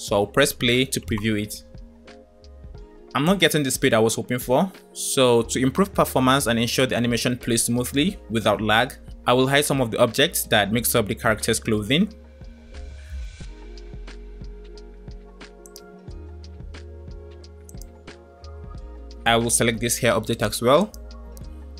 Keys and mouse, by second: 0.4 space, 2.0 space, 6.3 space, 8.7 space, 15.5 click, 20.7 shift+click.